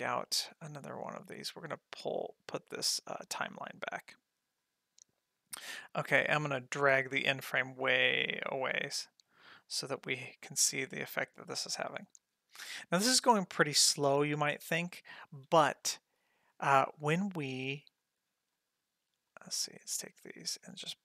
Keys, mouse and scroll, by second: 1.4-3.5 drag, 4.6 click, 6.6-8.0 drag, 10.1 space, 15.3 space, 15.8 middle click, 16.5 ctrl+middle click, 16.9 middle click, 18.0 click, 18.5 shift+click, 19.3 shift+click, 19.6 shift+click, 20.0 shift+click, 20.6 g.